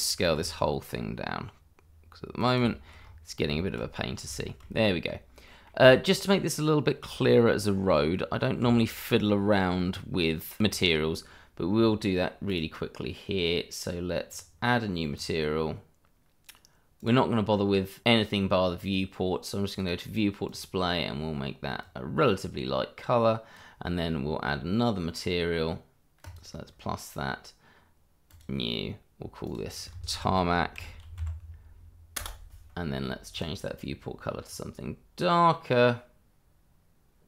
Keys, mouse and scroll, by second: 0.0 shift+middle click, 2.4 click, 2.7 middle click, 2.9-3.5 scroll up 1, 3.5 shift+middle click, 3.9-4.3 scroll up 1, 4.5 shift+middle click, 5.4 middle click, 6.2 shift+middle click, 7.3-8.1 scroll down 1, 8.2 middle click, 8.7 shift+middle click, 9.7-10.7 scroll up 1, 10.7 click, 11.7 scroll down 1, 12.5 click, 17.0 click, 18.8 click, 20.0 click, 26.2 click, 30.0-31.2 typing, 32.2 Return, 33.3 click, 35.4 click.